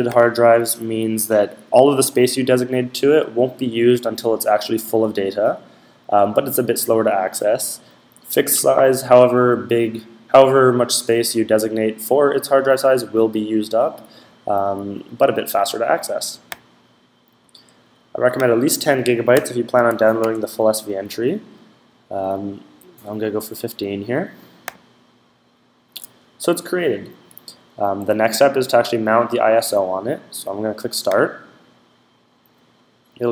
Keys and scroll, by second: 19.5-20.0 typing.